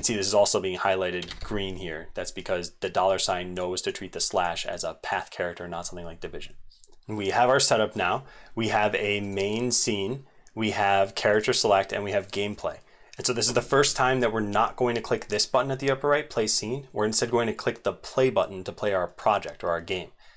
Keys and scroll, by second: 6.9 ctrl+s, 7.2 ctrl+s, 7.2 ctrl+v, 7.2 ctrl+x, 7.2 super+2.